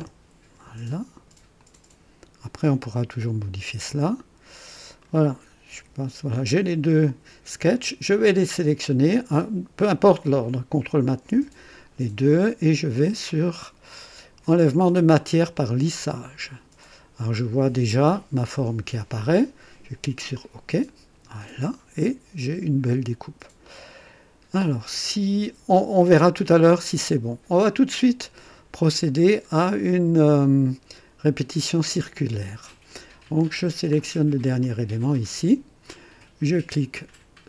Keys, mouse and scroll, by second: 0.0 Return, 1.5 click, 2.8-3.6 right drag, 3.9-5.2 drag, 4.5 typing, 5.7 &, 8.2 click, 10.9 ctrl+click, 11.1 typing, 15.5 click, 16.8-19.5 drag, 20.3 click, 21.4-25.8 drag, 27.0-28.8 drag, 33.6 scroll down 1, 34.6 click.